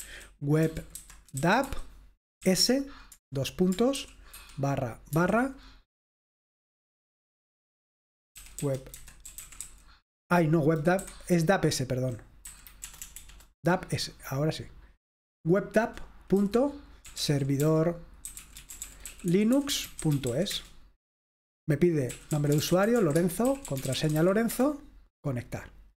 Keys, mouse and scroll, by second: 0.1-2.4 typing, 4.0-5.2 typing, 8.4-9.9 typing, 11.3-12.0 Left, 12.8 BackSpace, 13.0 BackSpace, 13.3 BackSpace, 13.4 BackSpace, 15.2 click, 16.6-20.8 typing, 21.9-24.7 typing.